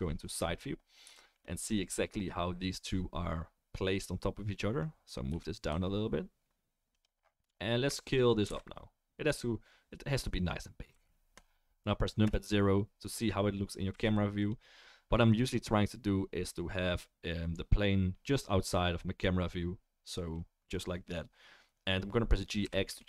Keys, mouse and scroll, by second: 2.3-16.9 right drag, 5.3 g, 8.4 s, 10.9 s, 12.2 KP_0, 13.9 s, 22.6 g.